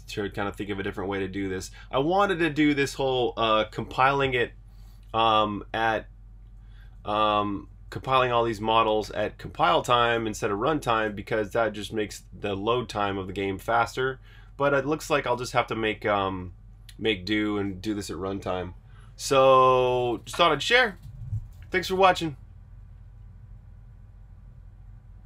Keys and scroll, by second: 4.7-9.0 typing, 11.5-14.4 typing, 15.6 j.